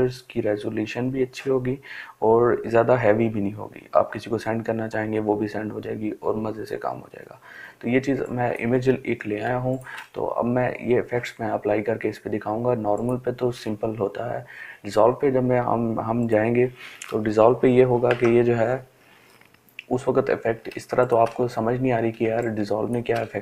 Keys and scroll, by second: 8.7 ctrl+space.